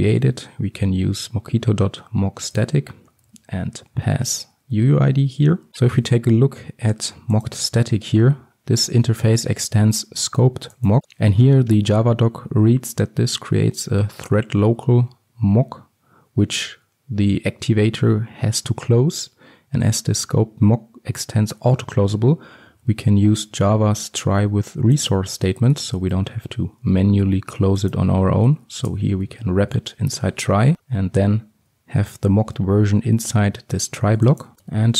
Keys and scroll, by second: 2.6 Return, 7.6 ctrl+b, 22.4 ctrl+alt+Left, 31.7 ctrl+shift+Up, 34.5 ctrl+x.